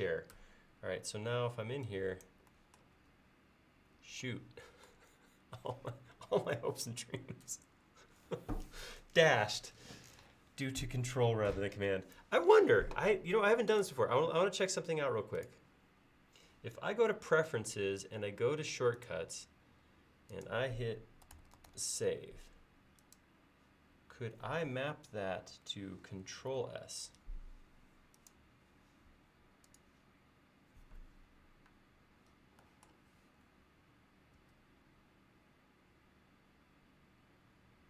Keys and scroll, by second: 3.0 ctrl+s, 4.1 ctrl+s, 4.9 ctrl+s, 21.1-22.2 typing, 26.4 ctrl+s, 34.4 ctrl+s.